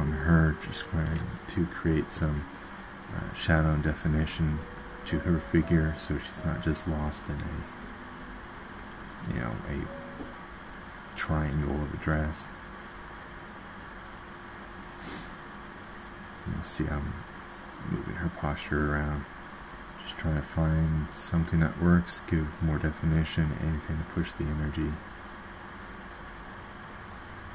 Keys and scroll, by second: 17.1 ctrl+z.